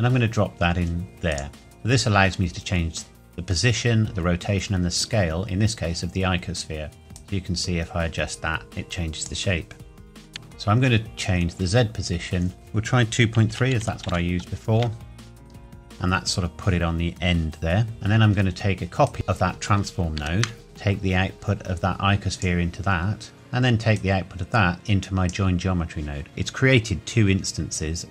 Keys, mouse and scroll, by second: 1.3 click, 7.2 click, 12.5 click, 13.5 KP_2, 13.8 KP_Decimal, 14.1 KP_3, 14.8 KP_Enter, 18.4-19.1 scroll down 1, 19.1 click, 20.2 shift+d, 20.6 click, 23.9 click.